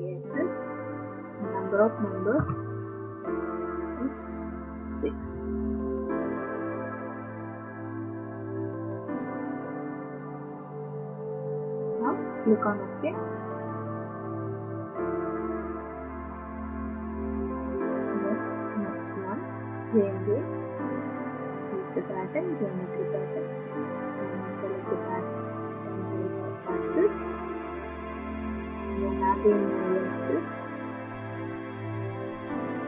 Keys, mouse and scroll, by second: 1.4 click, 2.4 BackSpace, 5.2 6, 9.5 click, 12.7 click, 19.2 click, 21.0 click, 22.4 click, 24.8 click, 26.9 click, 30.4 click, 32.4 click.